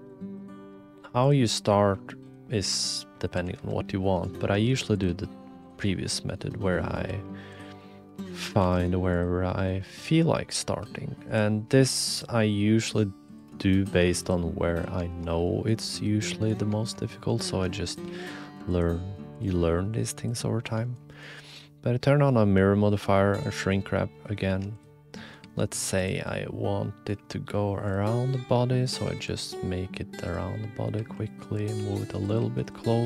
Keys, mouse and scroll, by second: 0.7 g, 1.5 s, 2.9-3.2 drag, 3.3 r, 4.5 s, 5.0 g, 5.9-6.3 drag, 6.6-6.9 drag, 7.0 g, 7.8-8.3 drag, 8.4 r, 9.4 click, 9.8 s, 10.8 g, 12.1-13.5 drag, 14.2 click, 15.1 shift+click, 15.2 middle click, 15.2 right click, 15.4 click, 15.4 middle click, 15.4 right click, 16.5 click, 16.8 shift+middle click, 17.5 2, 18.0 g, 19.3-20.4 drag, 20.8 shift+click, 21.1 click, 23.8 click, 24.5 2, 24.8 click, 25.4 e, 26.2 click, 27.1 e, 28.1 middle click, 29.3 e, 30.9-33.0 typing.